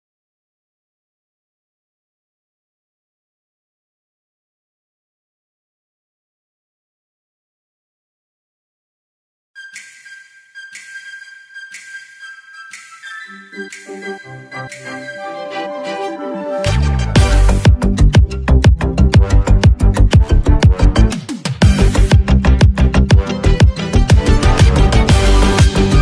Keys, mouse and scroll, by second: 5.2-6.6 typing, 8.0 space, 8.5 alt+scroll up 1, 8.9 space, 9.0 click, 9.4 space, 10.6-14.3 drag, 14.3 space, 14.4 click, 15.9 space, 16.0 click, 16.0 click, 17.2 space, 17.3 click, 19.0 space, 19.8-23.4 drag, 23.4 space, 23.5 click, 23.9 space, 24.5 click.